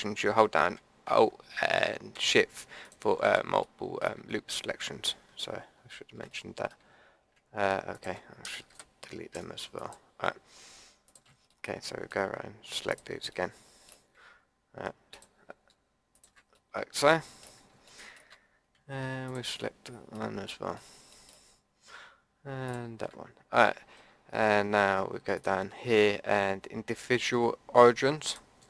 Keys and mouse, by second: 2.8 click, 3.7 middle click, 4.0 click, 7.9 click, 8.7 Delete, 11.5 click, 13.5-16.6 middle drag, 16.6 click, 16.6 middle click, 16.8 click, 17.0 click, 17.1 middle click, 19.3 middle click, 19.6 click, 19.8 middle click, 20.4 middle click, 21.1-24.6 drag, 25.3-28.3 drag.